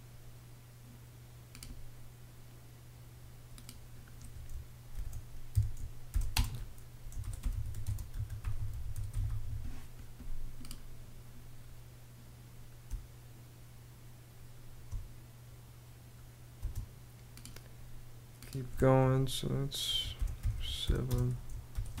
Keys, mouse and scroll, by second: 4.5-9.5 typing, 12.4 space, 16.1 space, 19.5-22.0 typing.